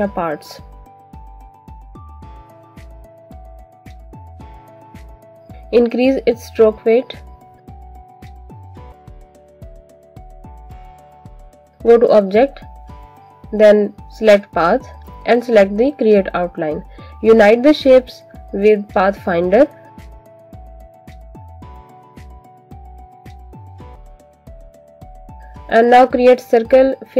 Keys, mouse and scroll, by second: 0.0 alt+click, 0.7 alt+click, 3.4 click, 5.3 click, 6.0 alt+scroll up 1, 6.4 click, 11.4 alt+scroll down 1, 11.6 click, 15.8 click, 17.6 click, 20.7 shift+click, 21.5 click, 24.0 alt+shift+click, 24.6 click, 25.5-26.0 scroll down 1, 26.0 click.